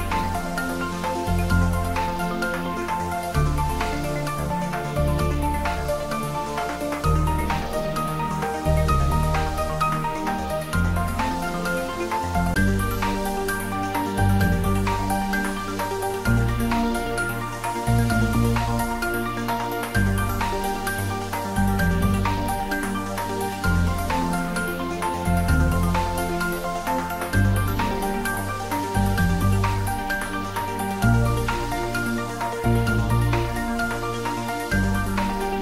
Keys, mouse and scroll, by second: 3.4 click, 3.7-4.4 middle drag, 7.5 e, 9.1 click, 10.5 scroll down 1, 14.4-14.7 scroll up 1, 15.6 g, 16.6 click, 17.2 ctrl+z, 17.7 scroll up 1, 18.6-19.3 drag, 22.2 r, 24.4 click, 24.7 scroll up 1, 25.2-26.4 middle drag, 26.4 ctrl+z, 26.8-27.7 middle drag, 28.9-29.8 middle drag, 30.6 click, 31.4 shift+z, 32.6-34.2 drag, 34.6-35.5 drag.